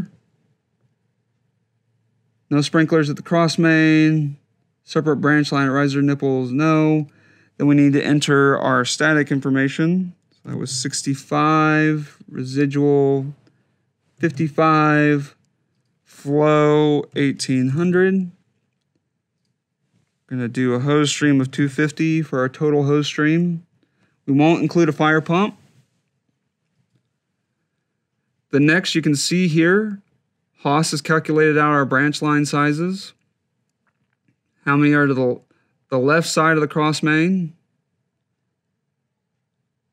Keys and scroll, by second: 10.3 6, 11.1 5, 14.0 5, 16.7-18.0 typing, 21.0 2, 21.4 0.